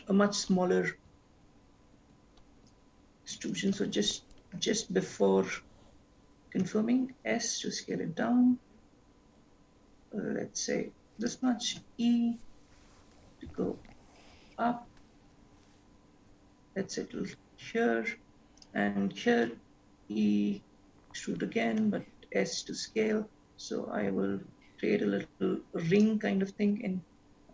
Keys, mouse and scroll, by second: 3.7 ctrl+z, 4.6 e, 11.9 e, 19.6 e.